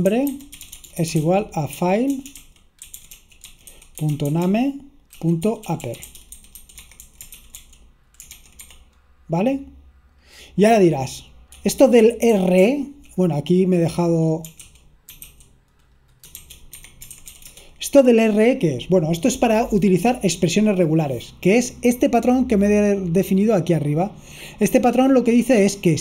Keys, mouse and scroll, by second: 0.2-8.7 typing, 11.4-13.2 typing, 14.4-18.2 typing, 17.0 Escape, 21.8 click, 23.6-24.7 drag, 24.9 click.